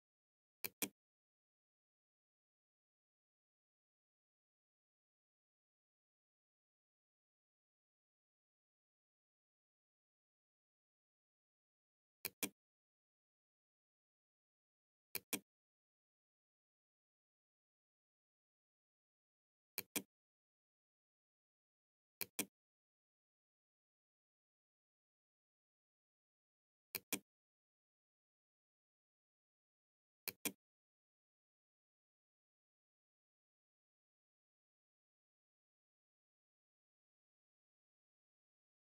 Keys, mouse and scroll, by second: 7.9 Tab, 11.3 click, 14.2-15.8 drag, 18.8 click, 21.3-22.8 drag, 26.0 click, 29.3 click.